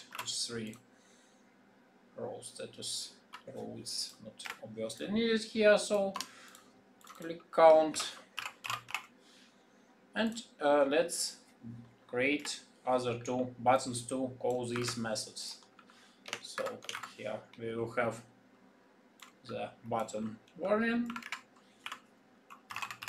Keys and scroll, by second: 7.8 shift+c, 16.7 ctrl+v, 16.9 ctrl+v.